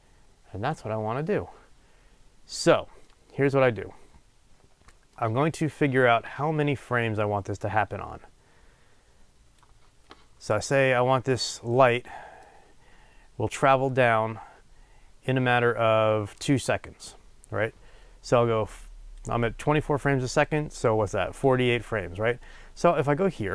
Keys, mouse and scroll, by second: 3.0-11.0 middle drag, 11.0 click, 11.7 middle click, 17.1-18.7 middle drag, 18.7-23.5 drag.